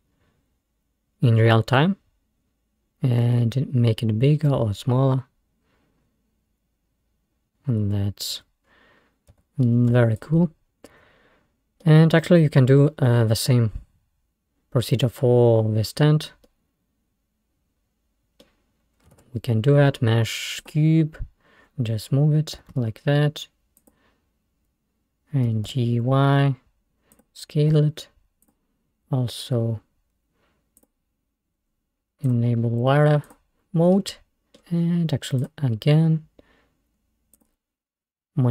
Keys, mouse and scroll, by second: 4.0-5.4 middle drag, 5.8 middle click, 8.7-9.1 scroll down 3, 9.4 Tab, 10.0 Tab, 10.2 drag, 11.1-11.5 scroll up 2, 11.9-14.6 middle drag, 14.6-15.5 scroll down 3, 16.0 scroll down 1, 16.5-19.2 middle drag, 19.2 shift+a, 21.2-21.6 scroll down 2, 22.6 g, 25.5 g, 27.8 s, 30.8 click, 31.5-32.3 scroll down 4, 32.3 scroll down 1, 32.3-34.0 drag, 34.0-34.8 middle drag, 34.8-35.5 scroll up 3, 35.5 click, 37.4 click.